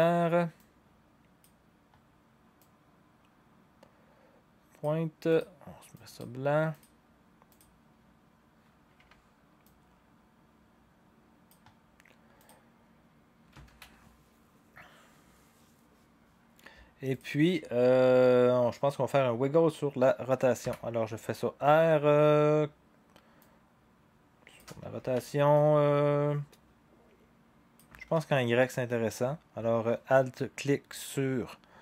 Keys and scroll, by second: 8.9 v, 13.7 ctrl+s, 25.0 ctrl+z, 25.0 r, 27.9 ctrl+z.